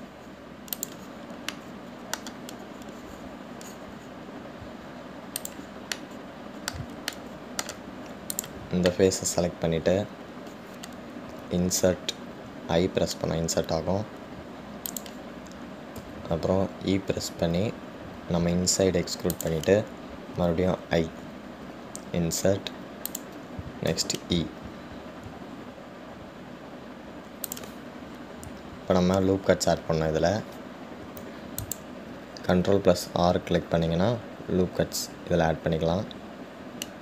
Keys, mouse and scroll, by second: 0.9-2.8 right drag, 2.8-5.9 middle drag, 6.7 click, 7.2-9.5 middle drag, 9.5 click, 10.6-11.1 scroll down 1, 11.1-12.6 scroll up 2, 29.7-30.5 scroll up 3, 32.3 ctrl+r.